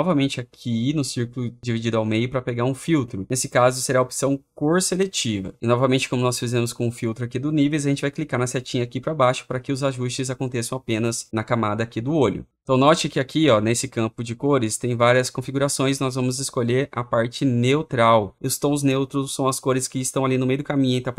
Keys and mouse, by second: 10.0 click, 14.6 click, 17.3 click, 17.5 click.